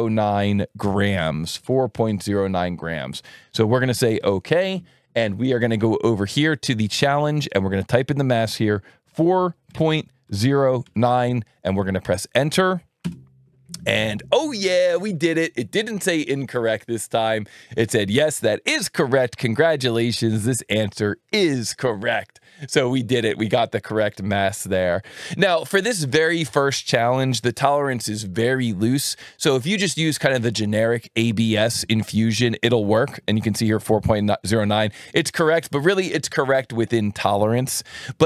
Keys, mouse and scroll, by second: 1.9 alt+1, 4.2 click, 5.4-6.9 drag, 8.1 click, 9.1 KP_4, 9.7 KP_Decimal, 10.2 KP_0, 10.8 KP_9, 13.0 KP_Enter.